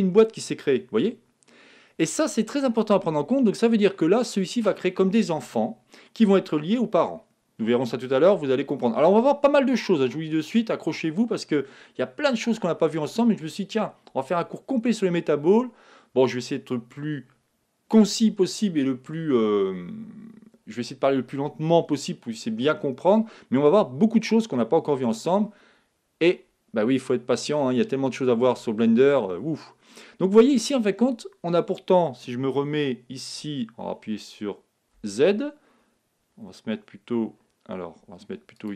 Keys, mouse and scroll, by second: 2.7-4.6 middle drag, 23.4-25.1 middle drag, 27.2-27.9 scroll up 1, 27.9-28.8 scroll down 1, 28.8-30.8 middle drag, 34.9 z, 38.5-38.7 drag.